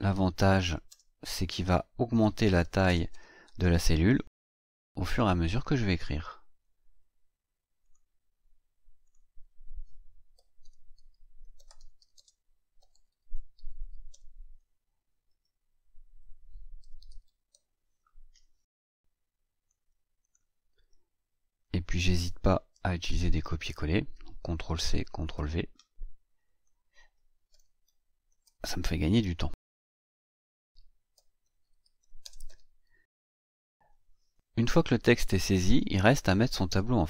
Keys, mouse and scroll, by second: 0.0-4.3 typing, 5.1 click, 7.8 click, 9.0 click, 10.0-14.6 typing, 15.3 Tab, 16.5-18.0 typing, 18.7 click, 20.2 click, 21.6 click, 22.7 ctrl+c, 23.2 ctrl+click, 24.1 ctrl+v, 25.1 ctrl+click, 25.3 ctrl+v, 26.4 click, 27.2-28.9 typing, 30.5-33.8 typing.